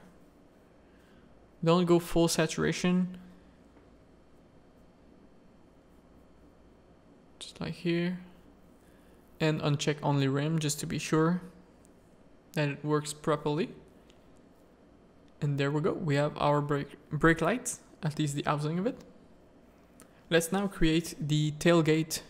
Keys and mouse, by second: 1.8 middle click, 3.2 alt+a, 3.2 z, 4.3 click, 6.0 click, 7.3 click, 8.8 click, 9.3 alt+a, 10.2 middle click, 11.6 middle click, 12.9 middle click, 13.7 middle click, 15.1 middle click, 16.4 click, 16.8 middle click, 17.0 middle click, 17.7 middle click, 19.2 alt+a, 20.3 z, 20.7 Tab, 21.0 middle click, 21.8 z.